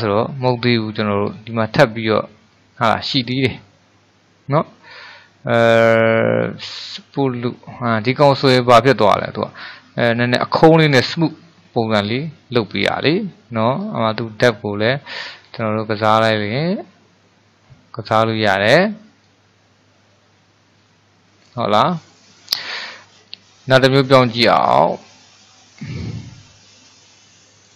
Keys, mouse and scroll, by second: 1.3-4.4 drag, 8.4-11.5 scroll down 2, 11.6-13.8 middle drag, 13.8-16.9 drag, 19.3-22.4 drag, 24.4-27.6 drag.